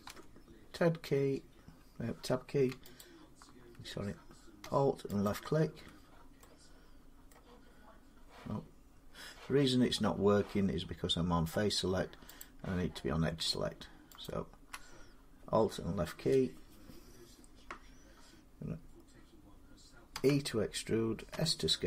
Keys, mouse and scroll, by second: 2.8 alt+click, 5.1 alt+click, 7.1 middle click, 12.2 click, 14.0 alt+click, 19.9 e, 21.1 s.